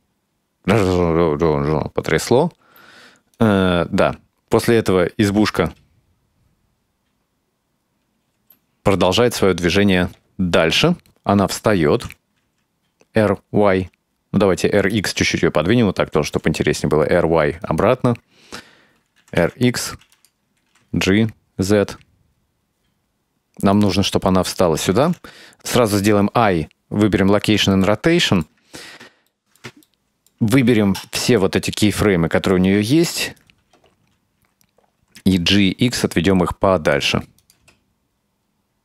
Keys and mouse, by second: 2.7 space, 3.4-5.7 drag, 5.7 space, 8.4 space, 12.0 r, 16.0 r, 19.2 r, 20.6 g, 25.6 i, 27.9 ctrl+middle click, 29.4-29.7 shift+middle drag, 29.9 ctrl+middle click, 30.6-31.1 right drag, 31.4-32.6 ctrl+middle drag, 32.9-33.4 right drag, 35.2 g, 37.4 click, 37.6 space.